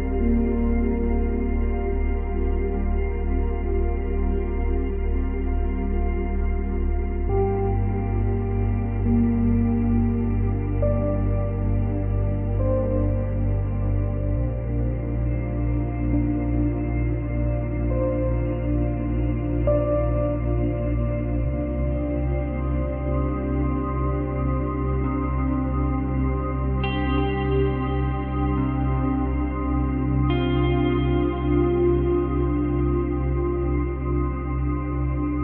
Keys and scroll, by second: 22.2 space, 24.4 space, 25.3 space, 27.7 space, 30.3 space, 31.7 space.